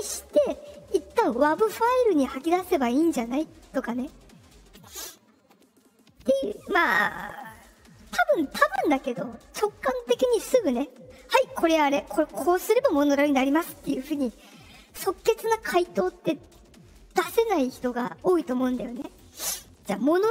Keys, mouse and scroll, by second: 19.0 click.